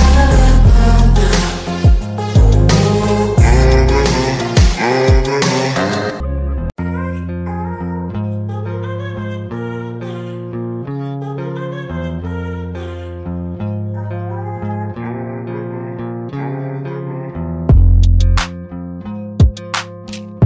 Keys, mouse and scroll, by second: 6.8-7.1 drag, 8.1 ctrl+g, 9.9-10.8 shift+drag, 14.2-14.8 alt+shift+drag, 15.8 right click, 16.3 click, 18.5 alt+click, 20.3 click.